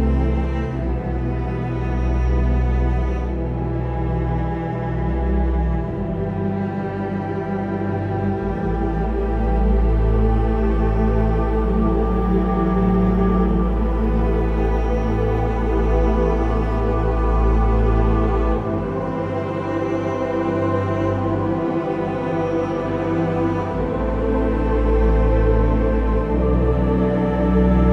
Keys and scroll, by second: 5.7 ctrl+e, 9.9 ctrl+o, 20.8 v, 21.3 ctrl+z, 23.3 ctrl+z, 23.4 ctrl+t, 25.9 b.